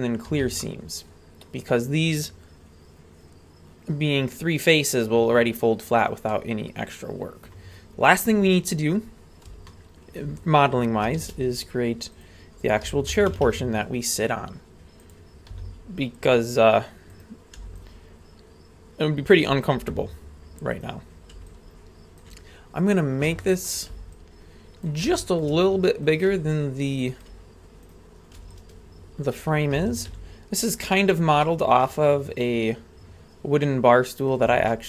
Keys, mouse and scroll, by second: 0.3 a, 0.6-1.7 middle drag, 5.8-6.3 scroll down 2, 6.3-7.4 middle drag, 8.5-9.0 scroll down 1, 9.7-10.2 shift+middle drag, 11.2 shift+a, 12.9 s, 13.9 scroll down 2, 15.0 click, 15.5 z, 17.1 right click, 17.8-19.4 ctrl+drag, 20.8 right click, 21.5 ctrl+click, 22.8-23.3 right drag, 23.4 shift+middle click, 24.2 ctrl+click, 25.1 shift+middle drag, 26.1 right click, 26.5 ctrl+click, 27.9 right click, 28.6 ctrl+click, 29.8 a, 30.1 z, 31.1-31.4 scroll down 1, 31.4-34.3 middle drag, 34.7 shift+middle click.